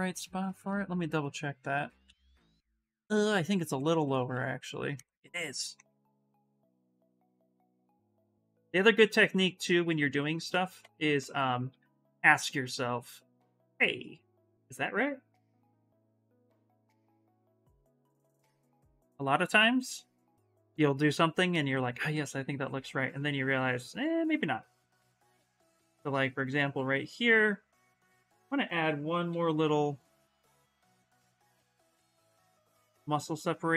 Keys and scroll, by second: 1.0 alt+Tab, 1.6 alt+Tab, 1.8 alt+Tab, 2.1 alt+Tab, 2.7 alt+Tab, 3.0 alt+Tab, 3.4 alt+Tab, 3.6 alt+Tab, 4.1 alt+Tab, 6.2 ctrl+z, 8.4 ctrl+z, 8.6 ctrl+z, 8.7 ctrl+z, 9.0 ctrl+z, 9.1 ctrl+z, 9.4 ctrl+z, 9.6 ctrl+z, 9.8 ctrl+z, 10.2 ctrl+z, 10.5 ctrl+z, 10.9 ctrl+z, 11.5 s, 16.2 ctrl+z, 16.5 ctrl+z, 17.6 x, 21.6 s, 27.1 s, 28.6-29.7 typing.